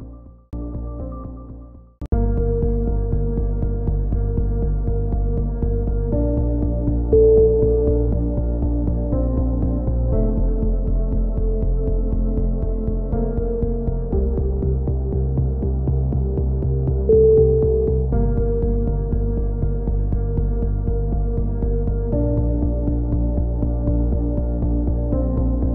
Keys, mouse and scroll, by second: 5.4 ctrl+KP_7, 6.4 click, 9.3 middle click, 10.2 z, 11.0-12.0 middle drag, 12.0 z, 12.2 middle click, 13.4 z, 15.8 KP_3, 16.1 z, 17.5 z, 17.8 z, 22.9 Tab, 23.4 z, 23.7 z, 24.2 middle click, 25.3 middle click.